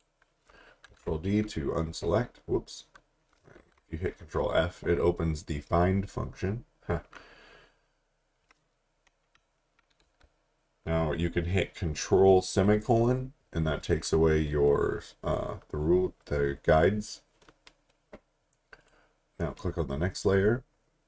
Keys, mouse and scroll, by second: 0.9 ctrl+d, 2.7-3.6 typing, 18.8 click.